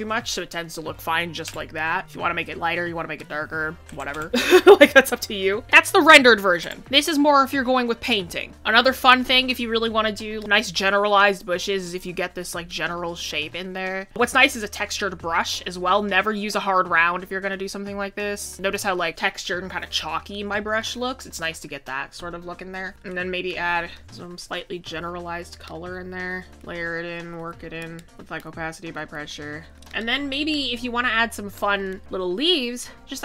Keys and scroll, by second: 19.1 ctrl+z, 22.9 ctrl+z, 26.2 ctrl+z, 29.7 ctrl+z.